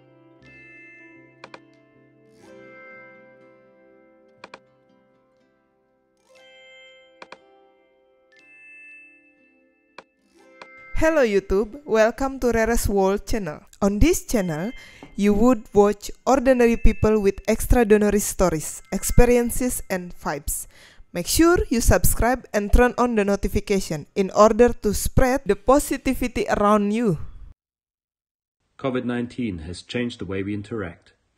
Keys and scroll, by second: 10.6 space.